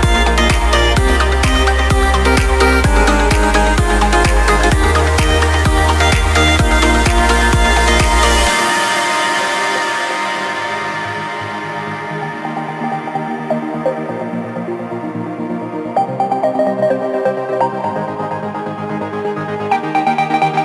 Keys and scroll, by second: 1.0 ctrl+space, 7.9 ctrl+space, 14.0 ctrl+z, 14.5 ctrl+space, 18.8 ctrl+space.